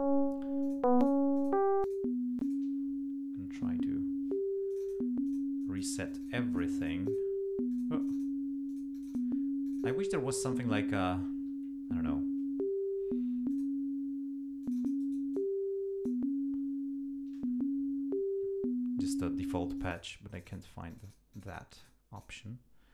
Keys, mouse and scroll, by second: 0.6 click, 1.0 click, 1.4 click, 1.8 click, 2.4 click, 4.7 click, 5.3 click, 5.6 click, 6.1 click, 6.5 click, 7.7 click, 8.0 click, 8.7 click, 9.7 click, 13.5 click, 14.6-16.3 drag, 15.0 right click, 19.8 click, 20.3 click, 20.9 click, 21.3 click, 21.8 click, 22.2 click.